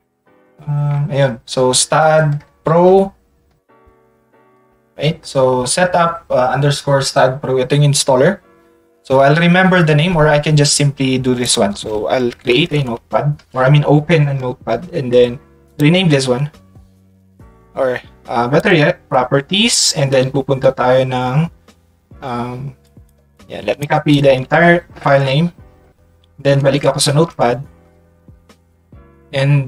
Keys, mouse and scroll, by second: 11.4 click, 12.7 e, 18.5 click, 22.8 click, 23.3 click, 24.1 ctrl+c, 24.4 ctrl+c, 25.8 Tab, 26.4 Tab.